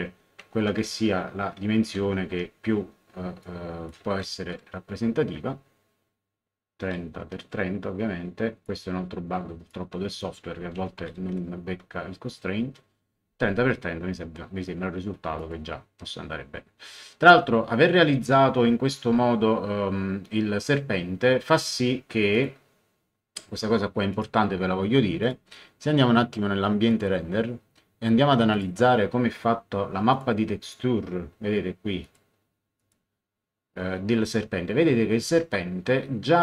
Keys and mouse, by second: 0.4 shift+End, 2.0 shift+End, 3.4 click, 4.4 KP_3, 4.4 KP_0, 5.3 Tab, 7.1 KP_3, 8.6 click, 9.7 click, 10.7 End, 11.2 KP_3, 11.6 Tab, 15.3 click, 22.3 click, 24.1 click, 25.2 click, 26.9 click, 28.5 click, 30.1 click, 32.0 click.